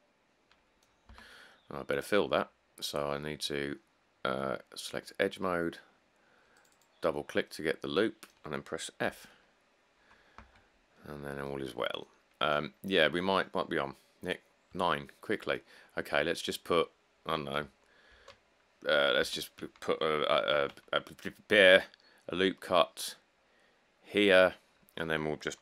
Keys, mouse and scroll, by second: 1.3 Tab, 9.3 f, 10.6 Tab, 11.9 middle click, 12.1 middle click, 12.9 middle click, 13.1 middle click, 18.3 a, 19.4 Tab, 20.7 ctrl+r, 24.9 click, 25.1 click.